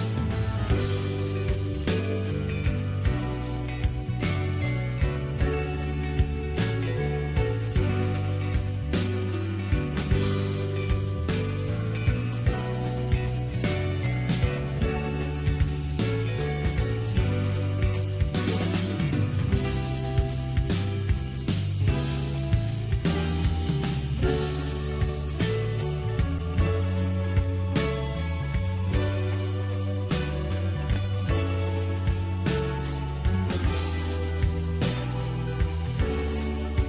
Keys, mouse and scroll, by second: 0.5-5.4 drag, 8.1-12.7 drag, 15.5-18.5 drag, 22.5-25.6 drag, 28.1-29.2 scroll down 10, 29.2-30.5 middle drag, 30.5-31.3 scroll up 5, 31.3-35.5 shift+middle drag, 35.5-36.8 drag.